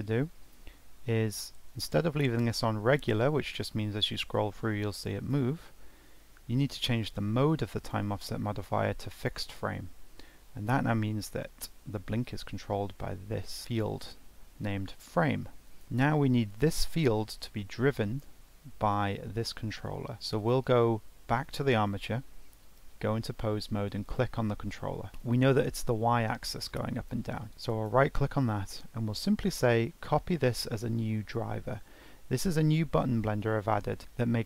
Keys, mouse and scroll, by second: 1.7-4.8 drag, 7.8-13.6 drag, 15.6-16.6 drag, 20.2-21.5 drag, 22.9 ctrl+Tab, 24.0 click, 25.1 ctrl+z, 27.7-30.9 right drag.